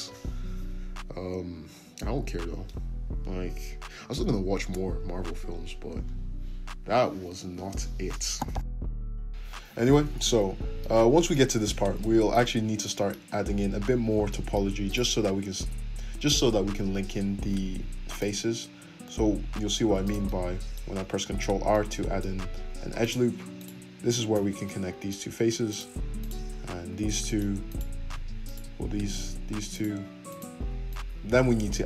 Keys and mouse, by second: 0.9-4.7 ctrl+middle drag, 2.6 g, 4.7-14.9 right drag, 13.4 `, 14.9-17.6 middle drag, 17.7 ctrl+r, 22.7 2, 23.0 click, 23.5 shift+click, 24.3-25.7 middle drag, 24.3 f, 25.7 click, 25.7 shift+middle click, 26.2 shift+click, 26.2-27.6 shift+middle drag, 26.8 f, 27.6 click, 27.7 middle click, 28.4 shift+click, 28.6-29.7 middle drag, 29.2 f, 29.7 click, 29.8 middle click, 30.3 click, 30.3 middle click, 30.9 shift+click, 30.9 shift+middle click, 31.0 ctrl+z, 31.1 `.